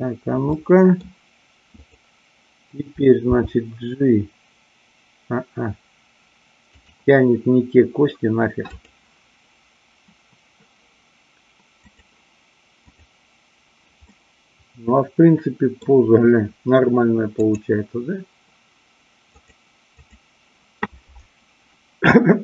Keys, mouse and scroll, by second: 0.6 middle click, 1.7 click, 3.2 g, 6.7 click, 11.9 click, 12.7-13.7 drag, 14.0-15.9 middle drag, 19.5 click, 19.9 click.